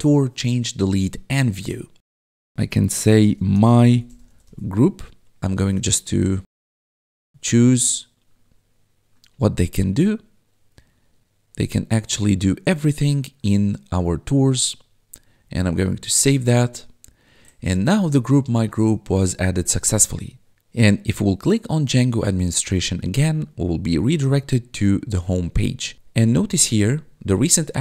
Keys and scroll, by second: 2.9-4.9 typing, 18.1 1, 19.7 1, 25.9 1, 26.9 1.